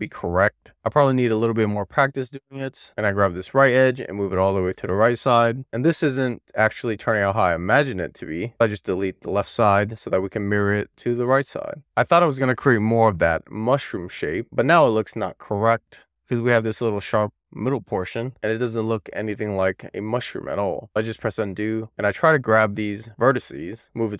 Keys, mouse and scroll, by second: 2.8 click, 5.0 alt+z, 5.1 n, 7.4 click, 8.4 alt+z, 8.5 click, 9.2 x, 9.8 alt+z, 11.5 click, 12.6 alt+z, 13.2 alt+z, 16.3 alt+z, 17.3 alt+z, 19.4 alt+z, 21.3 super+z, 21.8 super+z, 23.6 click.